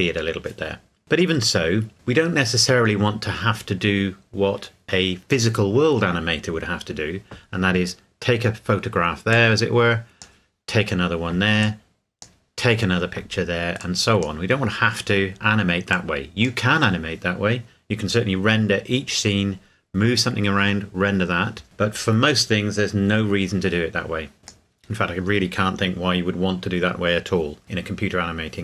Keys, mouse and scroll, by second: 9.3 click, 14.2 click, 24.4 click.